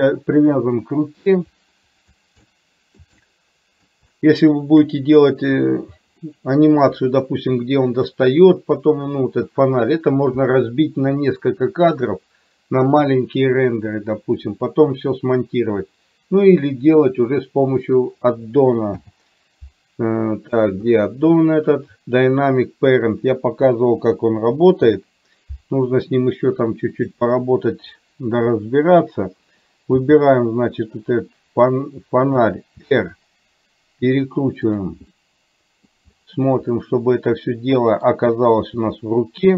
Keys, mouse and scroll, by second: 2.5 middle click, 3.3 shift+middle click, 4.3 shift+middle click, 6.4 middle click, 19.0 n, 24.8 n, 27.0 click, 30.1 g, 33.0 r, 35.3 middle click, 36.9-38.1 middle drag, 38.8 g.